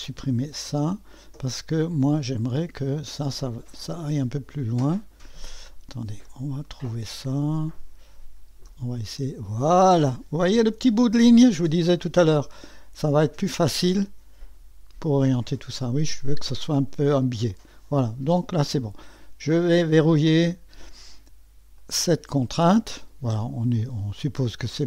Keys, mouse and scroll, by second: 0.0 click, 0.3 click, 0.7 Delete, 2.1-5.4 drag, 6.3-7.7 drag, 8.7-10.4 drag, 11.7-15.8 drag, 19.7 click, 21.7 click.